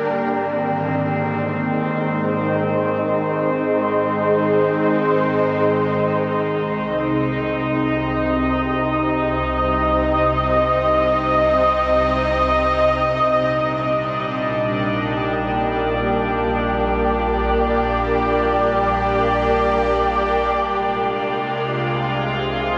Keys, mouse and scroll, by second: 6.3 right click, 7.2 click, 10.9-11.3 scroll down 1, 11.3-11.9 typing, 11.7 click, 12.1-14.8 drag, 14.8-16.5 typing, 15.0 click, 17.1 click, 18.5 Left, 18.9-20.3 typing, 19.9 click, 20.1 click, 20.5 click.